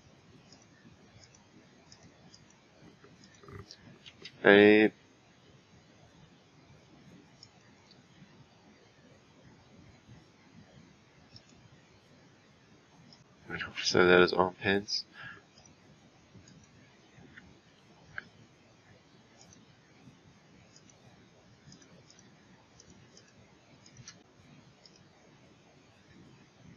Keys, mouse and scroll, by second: 0.5 click, 1.2 click, 1.9 click, 3.2 click, 4.1 a, 7.4-10.5 drag, 19.4 click, 20.7 click, 21.7 click, 22.1 click, 22.8 click, 23.1 click, 23.8 click, 24.8-26.7 drag.